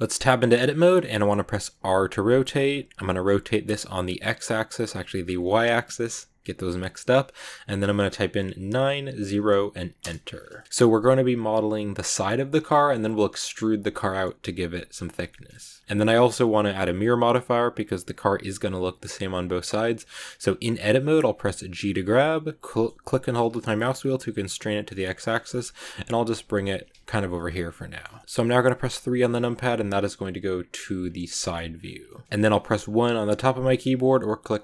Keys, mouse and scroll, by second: 0.1 Tab, 0.5 middle click, 0.8-1.7 scroll down 1, 1.7 r, 10.3 scroll down 1, 10.5-15.8 middle drag, 15.8 scroll down 1, 16.0-19.7 middle drag, 25.3 shift+middle click, 25.7 g, 27.1 ctrl+z, 27.4 middle click, 28.0 scroll up 1, 28.0-29.1 shift+middle drag, 29.1 KP_3, 30.9 click, 31.3 shift+middle click, 31.6 scroll down 3, 31.9 shift+middle click, 32.4 click, 32.7 1, 33.8 click.